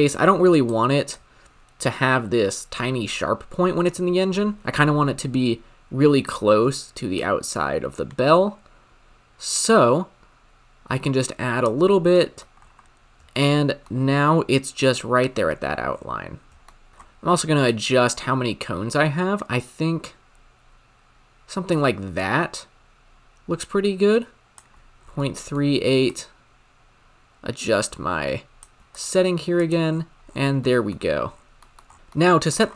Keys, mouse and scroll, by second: 7.5-10.2 shift+drag, 12.1-12.5 shift+middle drag, 12.5-13.3 scroll up 8, 13.3-15.7 shift+middle drag, 15.7-16.6 scroll down 11, 16.6 shift+middle click, 16.9-18.1 scroll up 9, 18.1-20.7 shift+drag, 24.9-25.3 scroll down 4, 25.3 middle click, 25.6-26.4 scroll up 3, 26.4-29.1 shift+drag, 29.6-32.7 drag.